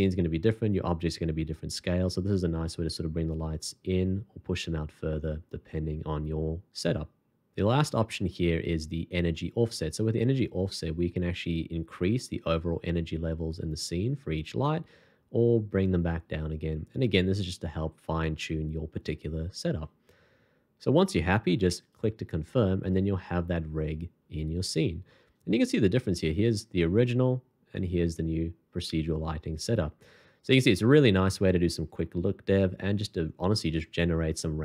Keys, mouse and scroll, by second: 26.2 shift+click, 27.8 shift+click.